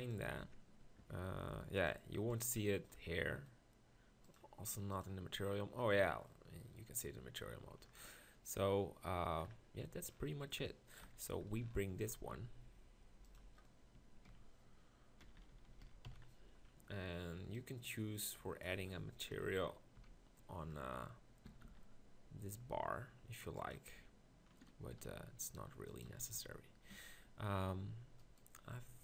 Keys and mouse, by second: 0.4 Tab, 9.0-10.5 middle drag, 11.0 KP_1, 12.3 g, 14.3 ctrl+KP_Decimal, 15.3-16.1 KP_4, 19.5 ctrl+KP_Decimal, 20.0 KP_1, 21.5 s, 25.0 g, 28.5 Tab, 28.6 Tab, 28.7 Tab.